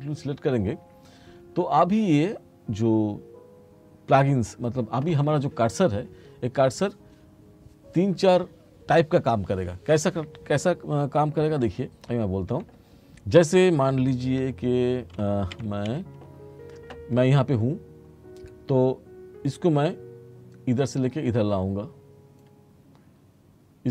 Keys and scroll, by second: 11.7 t, 14.5 s.